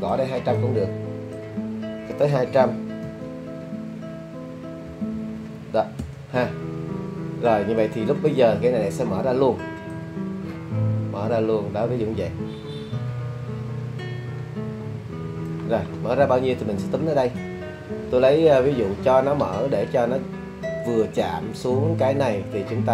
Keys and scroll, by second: 3.1 2, 4.9 0, 6.0 Return, 6.0 0.